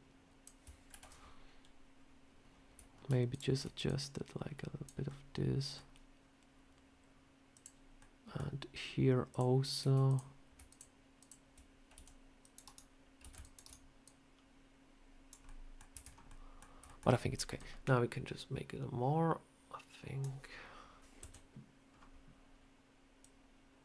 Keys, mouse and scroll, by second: 0.8 ctrl+z, 3.2 alt+shift+click, 3.7 click, 4.9 middle click, 7.4 click, 7.9 middle click, 9.2 click, 9.9 click, 10.6 shift+click, 10.6 shift+click, 11.8 c, 13.1 c, 13.9 click, 15.3 middle click, 15.8 Tab, 15.9 scroll down 2, 16.1 middle click, 16.7 shift+middle click, 17.4 click, 21.1 KP_7, 21.8-22.1 scroll down 1, 23.1 click.